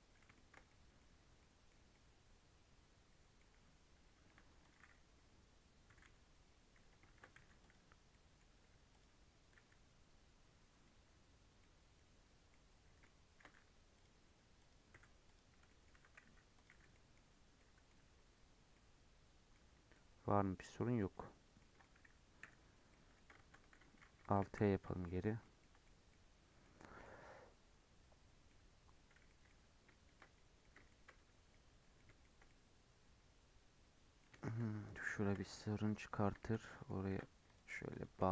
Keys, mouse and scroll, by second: 0.9-1.3 scroll down 4, 1.3 middle click, 1.6 scroll up 2, 1.9-3.5 middle drag, 3.5-4.2 scroll up 8, 4.2 1, 4.5 click, 5.8 g, 7.0 shift+Tab, 7.3 g, 8.0 middle click, 8.8 click, 9.5 g, 11.5 middle click, 11.9-12.4 scroll down 2, 12.4-13.5 middle drag, 13.5 g, 14.5 click, 14.9 g, 15.5 scroll down 1, 15.6 middle click, 15.8 a, 16.6 m, 16.8-17.5 scroll down 6, 16.8 middle click, 17.5 middle click, 17.9 Tab, 18.6 middle click, 19.5 Tab, 19.9-21.0 middle drag, 21.0 Tab, 21.3 scroll down 1, 21.5 middle click, 22.3 /, 22.8 middle click, 23.3 Tab, 24.3 alt+h, 24.8 Tab, 25.0-25.4 middle drag, 25.4 scroll down 1, 25.5-29.5 middle drag, 29.5 scroll up 2, 29.8-31.0 shift+middle drag, 31.0 scroll up 1, 31.2 Tab, 31.4-34.7 middle drag, 34.7-35.1 scroll up 1, 35.1 shift+middle click, 35.5 click, 36.6 middle click, 37.0 ctrl+r, 37.8 click.